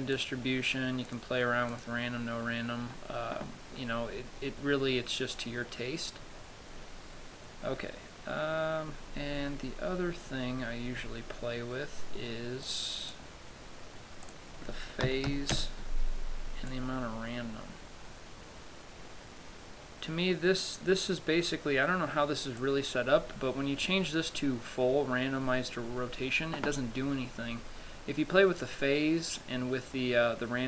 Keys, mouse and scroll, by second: 0.4 click, 1.4 click, 2.0 click, 6.1 scroll down 1, 6.9-7.8 scroll down 3, 7.8-9.1 scroll down 3, 9.1-9.5 scroll down 2, 10.9-11.3 scroll down 5, 13.0 click, 14.6 click, 17.0 click.